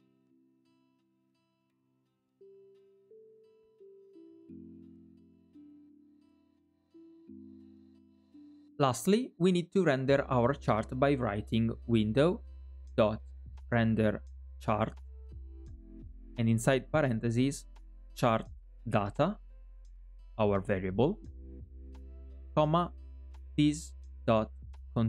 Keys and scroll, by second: 2.5 alt+è, 4.8 alt+è.